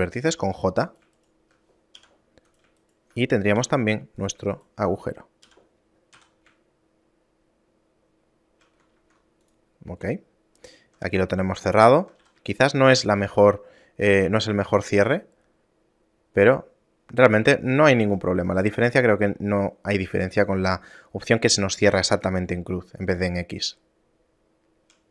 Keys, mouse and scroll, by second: 0.5 j, 1.0 right click, 1.4 shift+right click, 2.2 j, 2.7 right click, 3.0 shift+right click, 3.8 j, 4.4 right click, 4.8 shift+right click, 5.6 j, 6.4 a, 7.0 shift+middle click, 9.2 ctrl+Tab, 10.8 right click, 11.4 shift+right click, 12.4 a, 12.7 shift+middle click, 13.4 ctrl+Tab, 15.1 shift+middle click, 22.6 shift+middle click.